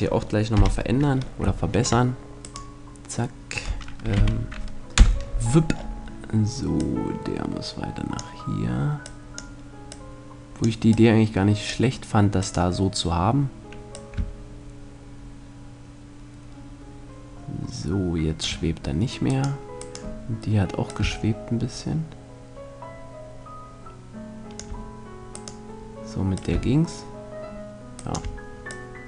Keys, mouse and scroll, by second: 0.0 F11, 0.0 click, 0.4 middle click, 1.9-3.2 drag, 3.2 right click, 3.6 z, 4.4 KP_0, 5.2-6.2 middle drag, 6.2-8.0 drag, 8.5-12.3 drag, 12.0-13.6 right drag, 13.4-15.1 drag, 19.0-21.0 right drag, 20.3-22.1 drag, 25.0-26.6 right drag, 25.8-27.6 drag, 28.2-29.0 drag.